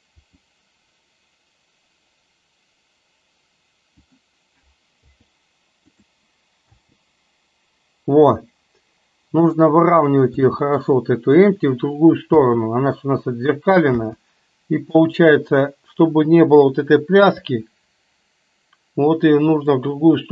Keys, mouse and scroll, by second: 0.2 r, 5.0 i, 6.7 space, 10.4 space, 10.8 click, 12.3 space, 14.1 space, 15.0 click, 17.5 r.